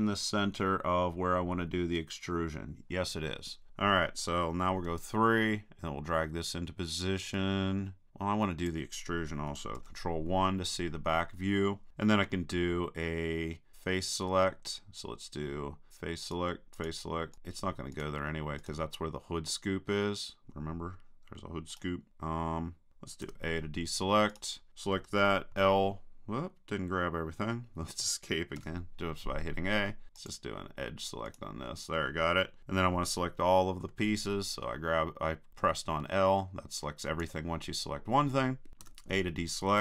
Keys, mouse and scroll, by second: 4.8 KP_3, 7.4-8.6 drag, 9.8 ctrl+KP_1, 13.7-15.4 drag, 16.2-20.4 right drag, 21.7-22.9 right drag, 23.3 a, 24.3-25.9 right drag, 25.5 l, 28.6 a, 30.2-32.9 drag, 31.3 right click, 33.9 l, 35.8-37.5 drag, 38.8 a.